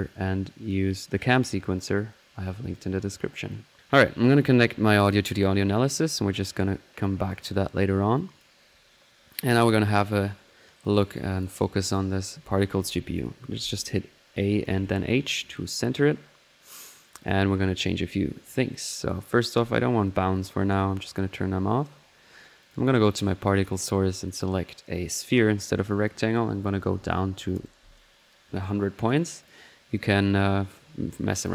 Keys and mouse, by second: 2.7-6.1 drag, 6.1 right click, 6.6 click, 7.4 click, 8.2 drag, 9.0-9.5 middle drag, 9.5-16.7 drag, 14.7 typing, 16.7 typing, 17.2 drag, 17.7 middle click, 19.6-22.1 drag, 22.6-28.6 drag, 29.4-31.5 drag.